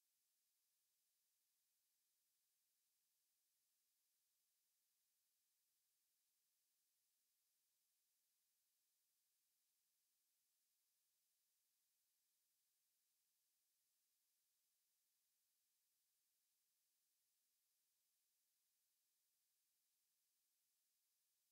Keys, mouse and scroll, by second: 0.3-1.3 drag, 4.7 shift+a, 8.8 s, 13.7 click, 21.3 click.